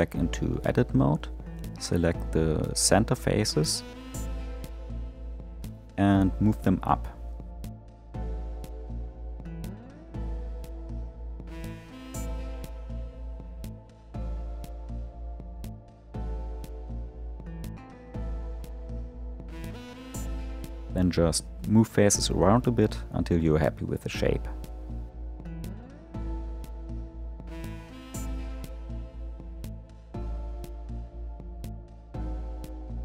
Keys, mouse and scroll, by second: 0.6 click, 1.7 shift+click, 3.0-6.0 middle drag, 6.0 g, 13.4 click, 14.7 g, 20.4 middle click, 21.2-21.7 scroll up 1, 21.7 shift+middle click, 22.2-22.9 scroll up 1, 22.9 click, 24.8 g, 29.3 click, 30.5 g.